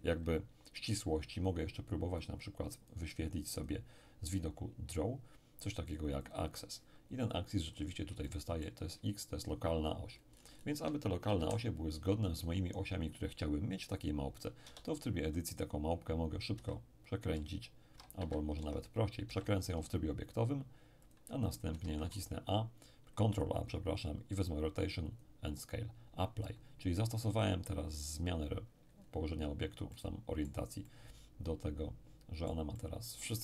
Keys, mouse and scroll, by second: 2.2-4.2 drag, 4.2-5.9 scroll down 1, 6.3 click, 7.2-8.2 scroll up 1, 8.2-9.6 shift+middle drag, 10.1-11.4 scroll down 1, 11.4 scroll down 1, 11.4 KP_7, 14.7 Tab, 16.5 r, 18.2 Escape, 18.6 Tab, 19.3 r, 21.1 ctrl+click, 21.8 ctrl+a, 25.1 click, 29.0-29.9 scroll up 2, 29.9-33.4 middle drag.